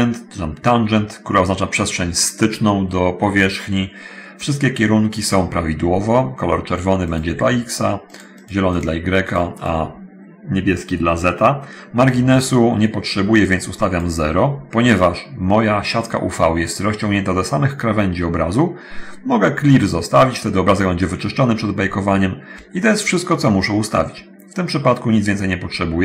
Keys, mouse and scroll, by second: 7.3 click, 8.3 click, 8.5 click, 8.9 click, 9.5 click, 13.6-14.1 drag.